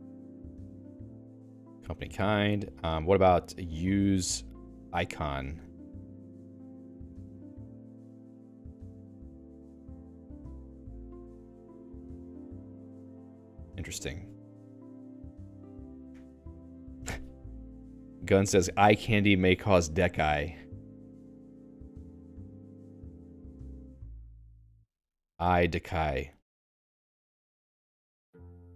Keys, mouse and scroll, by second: 1.0 l, 3.2-6.2 typing, 8.3 j, 9.4 n, 10.5 j, 11.2 j, 11.8 j, 12.2 k, 25.4 n.